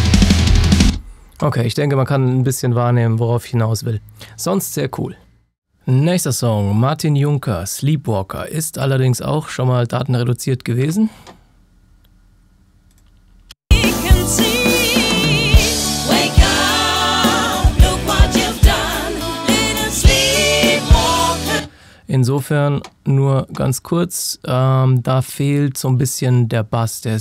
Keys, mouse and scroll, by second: 0.8 space, 1.4 click.